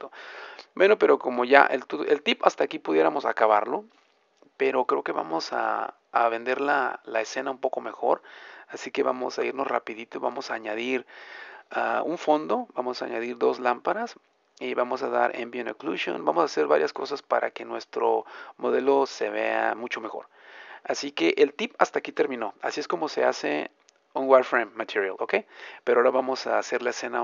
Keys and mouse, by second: 5.9-9.4 middle drag, 9.4 a, 10.4-16.4 middle drag, 18.4-19.4 middle drag, 22.1-27.2 middle drag.